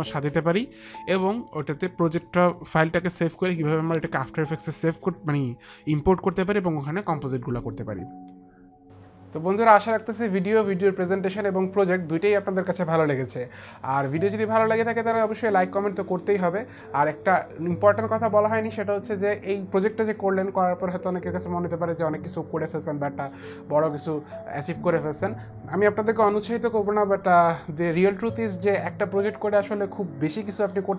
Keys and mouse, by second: 0.9 Return.